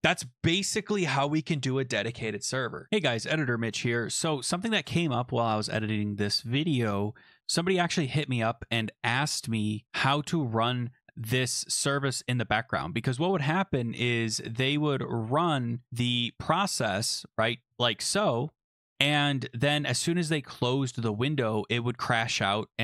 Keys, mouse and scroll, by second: 2.9 click, 2.9-4.0 scroll down 3, 4.2 click, 11.2 click, 14.0-14.9 scroll up 3, 14.9-15.3 scroll up 3, 15.8 Up, 17.6 Up, 17.6 Return.